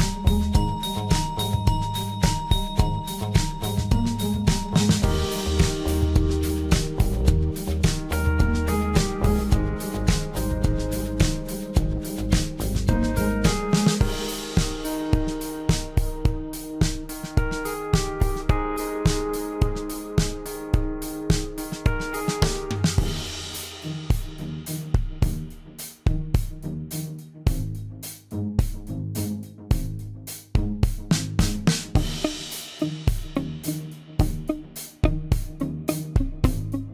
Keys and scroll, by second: 1.8 p, 9.8 l, 18.2 m.